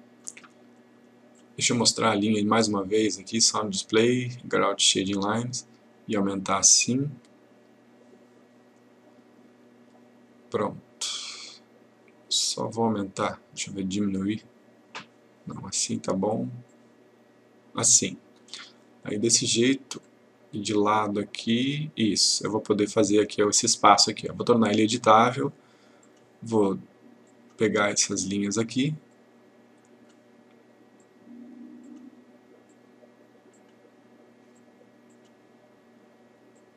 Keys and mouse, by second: 1.6-2.3 click, 3.6-5.4 click, 14.4 click, 20.1-22.8 click, 24.7 click, 27.9 shift+click, 29.4-30.3 shift+click.